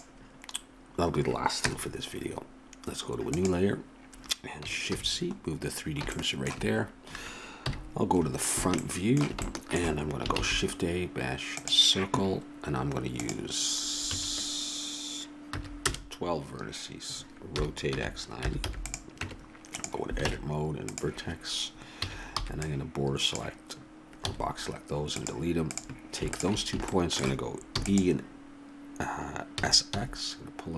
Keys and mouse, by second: 1.6 KP_0, 4.9 shift+c, 7.7 KP_1, 10.4 shift+a, 13.2-15.0 drag, 17.6 r, 19.2 Tab, 20.3 ctrl+Tab, 22.0 a, 22.4 b, 24.3 x, 25.8-26.9 right drag, 26.9-28.2 middle drag, 27.8 e, 29.6 s.